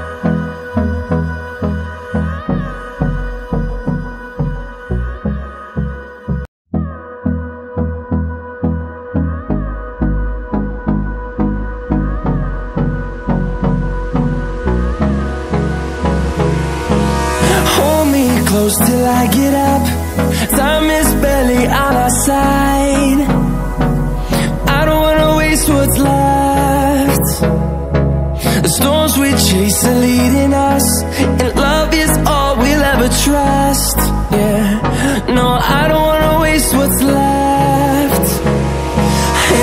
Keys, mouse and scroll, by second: 14.6 click, 15.9 Delete, 17.3 ctrl+alt+scroll down 2, 18.0 click, 18.9 ctrl+alt+scroll up 1, 19.9-23.3 drag, 23.9-24.5 ctrl+alt+scroll down 1, 24.9 ctrl+alt+scroll up 1, 25.6 click, 26.6-27.0 ctrl+alt+scroll down 1, 27.2 ctrl+alt+scroll up 1, 28.6-35.3 drag, 39.2 ctrl+alt+scroll down 1.